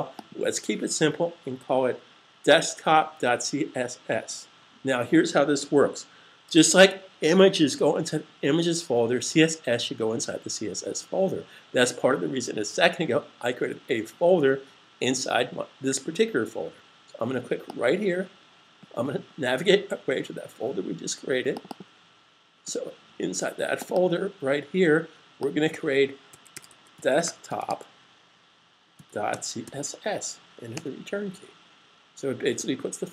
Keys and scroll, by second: 26.2-29.6 typing.